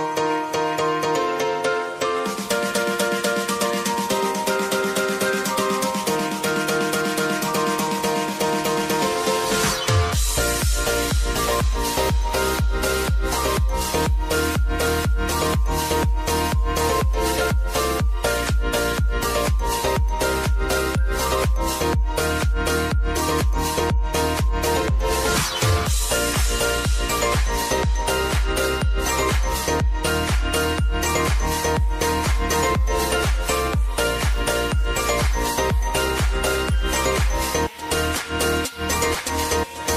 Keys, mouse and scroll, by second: 3.8 shift+g, 4.7 ctrl+a, 5.8-9.0 drag, 10.0-12.7 typing, 13.8-16.6 typing, 18.3 ctrl+a, 19.7-26.7 drag, 26.7 ctrl+alt+Home, 28.1 click, 38.0-39.9 drag.